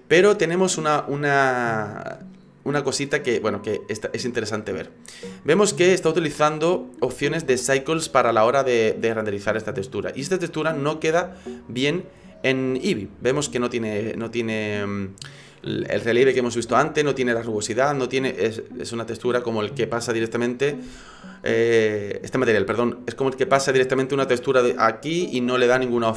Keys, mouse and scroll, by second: 10.6 click, 11.2 middle click, 14.0 middle click.